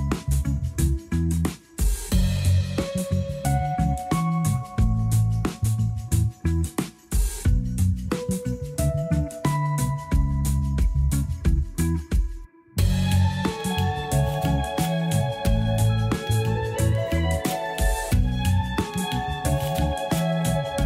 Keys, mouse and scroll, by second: 1.5-3.9 right drag, 3.9 s, 6.2 s, 8.5 s, 11.1 a, 11.3 a, 12.0 ctrl+r, 13.1 s, 15.3 a, 15.5 a, 15.9 ctrl+r, 16.9 a, 17.0 a, 17.3 click, 18.5 shift+click, 18.7 shift+click, 19.5 s.